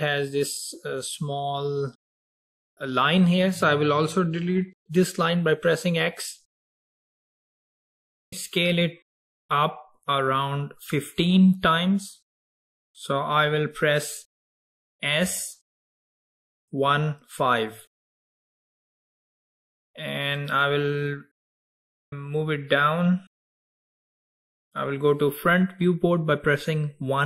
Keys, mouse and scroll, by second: 0.1 click, 6.1 x, 7.6 scroll down 2, 15.3 s, 21.8 click.